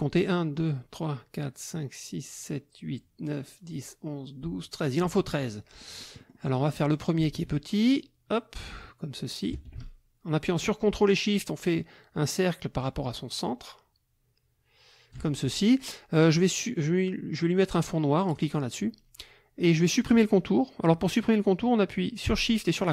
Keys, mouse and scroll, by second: 5.0 click, 5.8-7.1 drag, 7.8-15.3 ctrl+drag, 18.3 click.